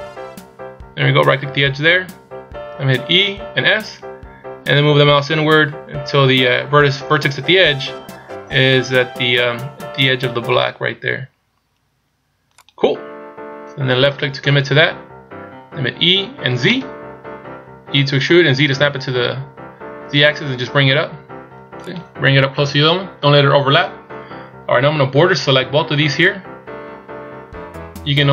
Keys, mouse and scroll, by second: 3.1 e, 16.0 e, 24.9 b.